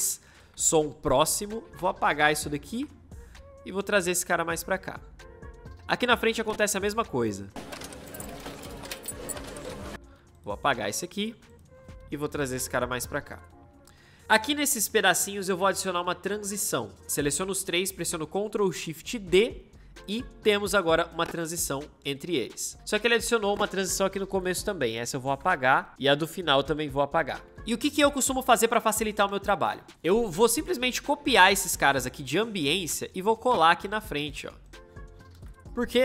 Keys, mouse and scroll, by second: 0.2 v, 7.3 space, 9.9 c, 11.2 v, 19.1 ctrl+shift+d, 19.8-22.3 drag, 32.6 ctrl+c, 33.3-35.0 drag, 35.2 ctrl+v.